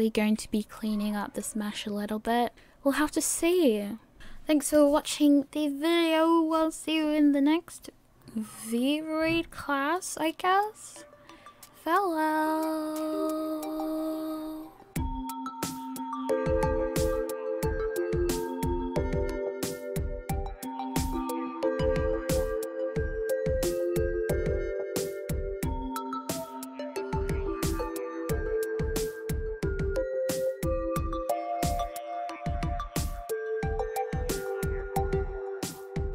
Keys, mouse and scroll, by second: 0.2 a, 0.8 middle click, 2.3 shift+middle click, 3.4 shift+middle click, 3.5 middle click, 4.2 click.